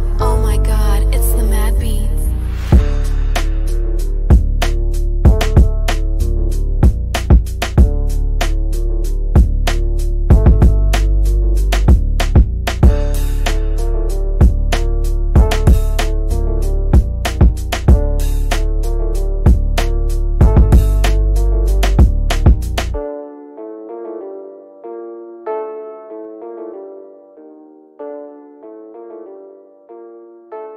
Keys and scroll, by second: 20.8 c, 25.0 shift+F2, 25.4 F3, 25.7 Escape, 26.0 F3.